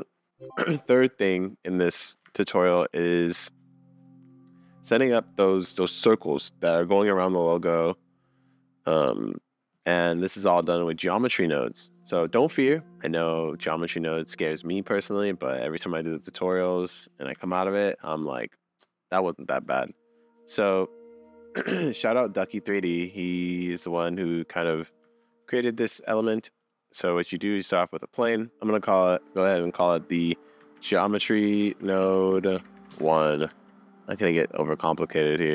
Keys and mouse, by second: 2.3 super+s, 2.9-4.3 drag, 11.4 click, 16.5 middle click, 17.4 super+s, 21.1-21.8 middle drag, 23.0-24.5 middle drag, 25.0 shift+a, 27.2-28.5 drag, 33.5 super+s.